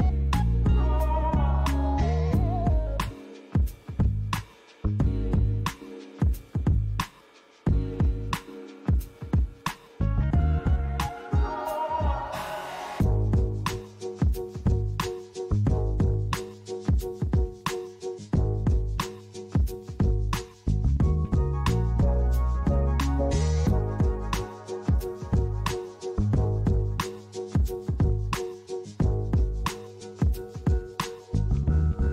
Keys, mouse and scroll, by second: 2.3 KP_7, 3.3-4.3 scroll down 6, 4.3 g, 5.9 click, 6.4 g, 7.4 click, 8.5 KP_1, 9.7-10.0 scroll up 1, 10.0 middle click, 11.7 shift+middle click, 13.1-13.5 scroll up 1, 13.9 KP_1, 15.0 KP_Decimal, 17.0 KP_3, 18.0 scroll down 1, 18.4 Tab, 27.1 click, 28.7 click, 29.4 click, 29.9 click.